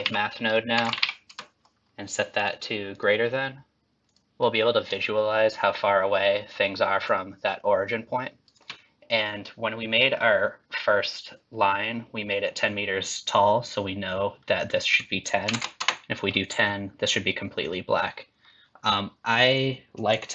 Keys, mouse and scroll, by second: 3.4 click, 4.3 click, 5.1 shift+click, 14.9 click, 20.1 click.